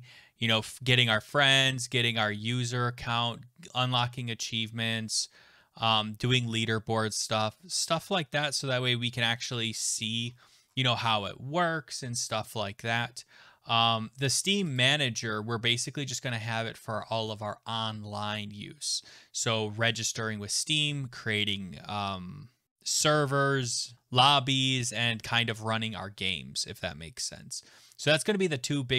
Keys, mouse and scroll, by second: 0.6-2.4 scroll, 2.4-3.4 scroll, 3.8-5.1 scroll, 5.1-7.5 scroll, 7.9-8.5 scroll, 9.1-11.9 scroll, 11.9-13.3 scroll, 13.3 scroll, 14.8 click.